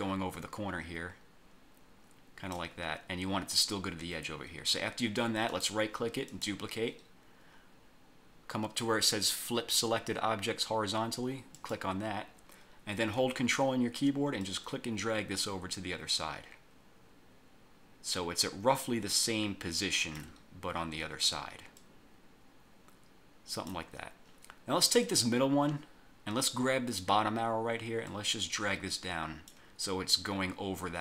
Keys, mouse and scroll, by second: 5.6 right click, 6.4 click, 11.7 click, 14.5-20.5 ctrl+drag, 21.9-24.0 ctrl+drag, 25.1 click, 28.1-29.8 drag.